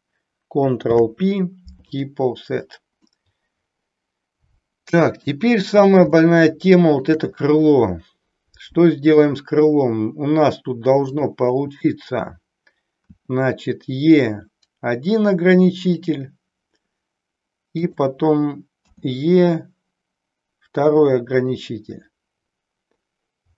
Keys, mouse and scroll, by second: 0.9 ctrl+p, 3.1-5.4 middle drag, 6.2 shift+middle click, 13.0 e, 15.9 click, 17.9 click, 18.9 e.